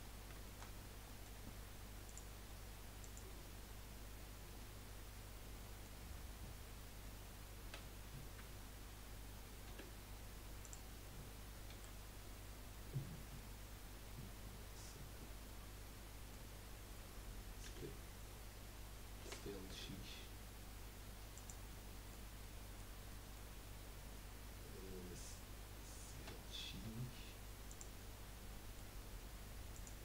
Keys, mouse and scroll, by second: 0.1 scroll down 2, 0.4 shift+middle click, 0.8 scroll up 1, 1.0-2.4 middle drag, 3.1-4.1 middle drag, 4.6-7.6 middle drag, 7.6 s, 11.7 KP_1, 13.4-16.4 middle drag, 17.6 x, 19.7 s, 21.7-26.2 middle drag, 26.2 s, 28.1-30.0 middle drag.